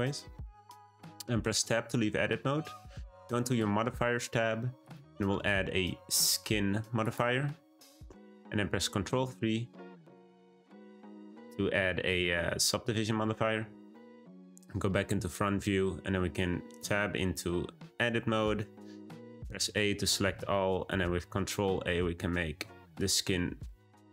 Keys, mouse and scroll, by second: 0.1-1.4 middle drag, 1.4 Tab, 3.4 click, 7.1 click, 9.1 3, 11.9 ctrl+3, 13.4-14.2 shift+middle drag, 14.2 `, 15.3-15.9 shift+middle drag, 15.9-16.7 scroll up 1, 16.7 Tab, 19.4 a, 21.0 ctrl+a.